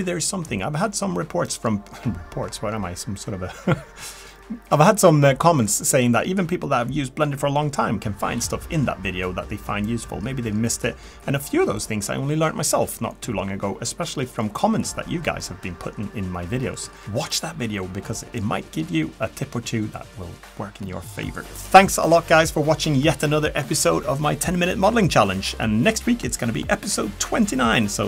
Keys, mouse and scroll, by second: 0.0-0.5 typing, 0.5 middle click, 0.8 middle click, 0.9-1.4 ctrl+right click, 1.0 ctrl+right click, 1.1 ctrl+right click, 1.4 middle click, 1.7 ctrl+right click, 1.7 ctrl+right click, 1.8 ctrl+right click, 1.9 middle click, 1.9-2.4 scroll up 2, 2.0 click, 2.1 middle click, 2.1 shift+middle click, 2.3 middle click, 2.3 2, 2.4 middle click, 2.5 click, 2.6 middle click, 2.9 o, 3.0 middle click, 3.1 g, 4.0 alt+o, 4.5 click, 4.5-7.7 typing, 5.0 middle click, 5.0 scroll up 1, 5.1 click, 5.4 click, 5.6 middle click, 5.6 click, 5.7 Tab, 5.8 middle click, 5.8 Tab, 5.9 click, 6.0 middle click, 6.0 click, 6.1 click, 6.3 middle click, 6.5 click, 6.6 click, 6.8 click, 6.9 middle click, 7.0 Tab, 7.0 middle click, 7.1 middle click, 7.2 middle click, 7.3 scroll up 1, 7.3 click, 7.4 Tab, 7.4 Tab, 7.5 middle click, 7.5 scroll down 3, 7.5 Tab, 7.7 middle click, 7.7 click, 7.9 scroll up 2, 8.0 shift+middle click, 8.0 click.